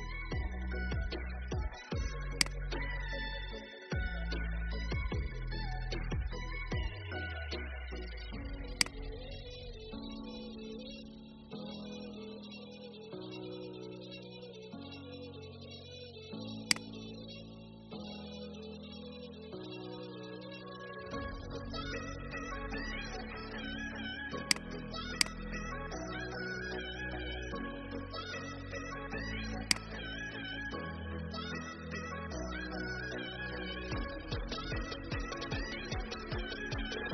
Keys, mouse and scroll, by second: 2.3-5.0 drag, 5.8 alt+scroll up 1, 8.8 alt+click, 14.2 alt+scroll down 1, 16.6 alt+click, 24.4 click, 25.3-26.3 drag, 28.1 scroll down 1, 29.6 alt+click.